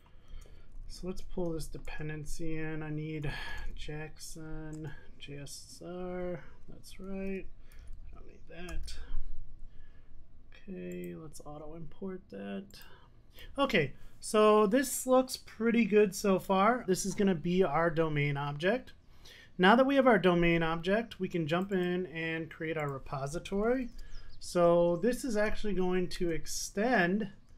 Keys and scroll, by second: 2.0 Return, 7.8 super+x, 8.8 super+s, 26.2 Return.